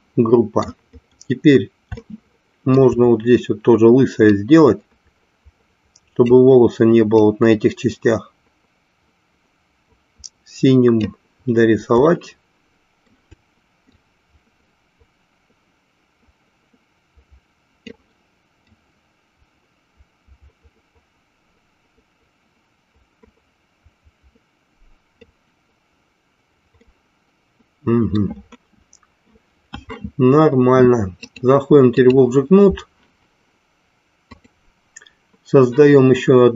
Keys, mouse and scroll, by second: 2.0 shift+middle click, 4.5-6.6 drag, 7.5-11.3 drag, 12.2 shift+middle click, 14.2-18.2 drag, 18.8-25.4 drag, 27.0-28.3 middle drag, 31.2-32.3 drag.